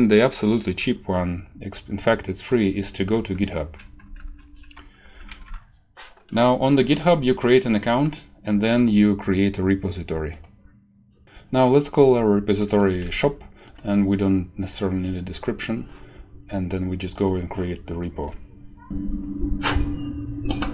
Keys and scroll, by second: 4.1 ctrl+c, 5.0 ctrl+t, 5.2 ctrl+v, 5.4 Return, 12.9 ctrl+c.